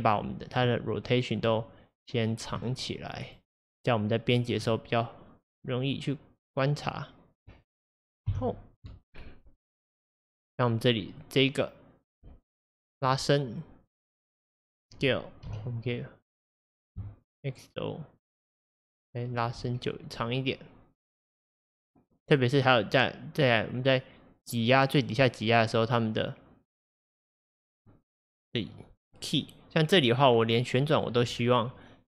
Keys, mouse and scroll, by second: 0.3-1.5 drag, 2.4-3.4 drag, 4.4-5.7 drag, 8.3 h, 9.2-9.7 scroll down 1, 9.7-11.3 middle drag, 11.3-15.6 drag, 15.6 s, 19.4 x, 19.5 x, 20.3-23.4 drag, 27.0-32.0 drag, 31.3 scroll down 1.